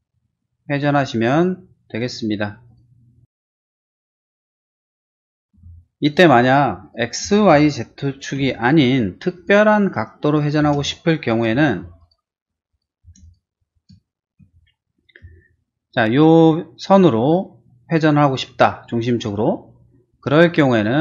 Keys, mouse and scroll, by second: 0.8 click, 1.3 click, 2.6 click, 3.2 middle click, 3.8 scroll down 1, 4.0 middle click, 4.3 space, 5.5 p, 6.0 click, 6.8 click, 7.2 space, 8.3 l, 9.3 click, 10.2 click, 10.6 space, 11.5 p, 11.7 p, 12.0 click, 12.6 click, 13.0 space, 13.2 click, 13.6 middle click, 14.0 middle click, 15.3 shift+middle click, 20.1 click, 20.3 click, 20.4 click.